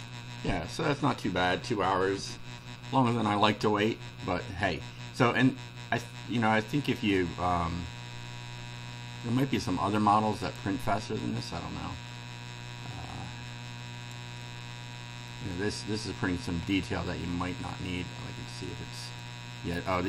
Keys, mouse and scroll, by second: 9.2-10.1 middle drag, 10.5 click, 12.8-14.3 drag, 14.7-15.5 middle drag, 15.7-17.1 scroll down 1, 17.1-18.8 right drag, 19.2-20.0 right drag.